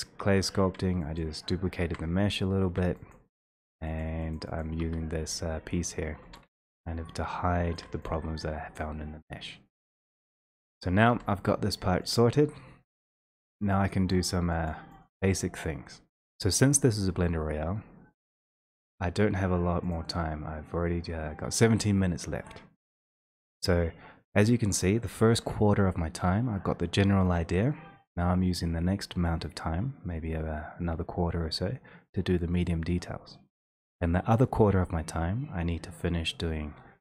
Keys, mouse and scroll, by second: 0.3 x, 1.2 click, 1.8 ctrl+z, 2.2 x, 2.7 x, 3.1 click, 3.5 click, 4.6 click, 4.7 click, 4.9 1, 6.2 w, 10.0 click, 11.1 3, 12.2 click, 13.2 x, 14.3 click, 14.7 click, 15.1 click, 15.9 click, 16.2 1, 20.5 click, 21.9-25.6 drag.